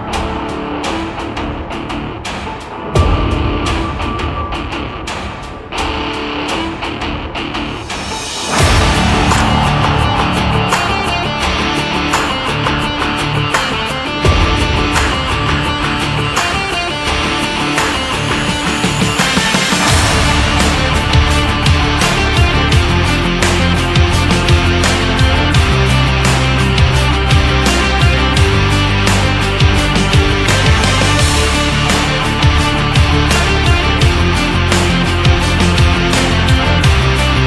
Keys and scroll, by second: 34.6 ctrl+=.